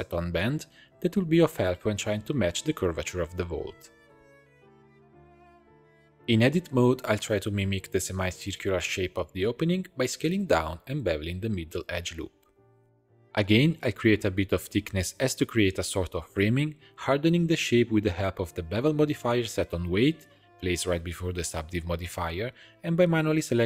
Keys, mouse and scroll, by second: 2.8 click, 3.8 shift+click, 4.6 r, 5.6 Tab, 5.8 click, 6.3 shift+middle click, 6.6 2, 7.0 alt+click, 7.9 s, 10.6 ctrl+b, 13.6 a, 13.8 i, 15.4 e, 16.7 2, 16.9 alt+click, 17.2 e, 17.7-19.8 drag, 20.3-23.2 drag, 23.2 Tab, 23.4 middle click.